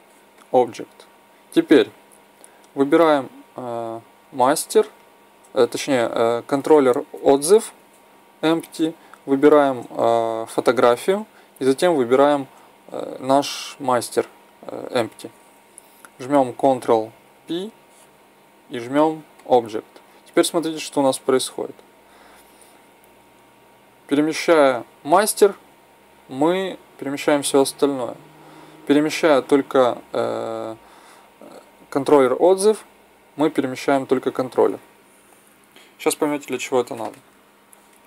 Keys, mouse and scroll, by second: 17.2 ctrl+p, 20.7-23.4 right drag, 23.3 g, 32.6 g.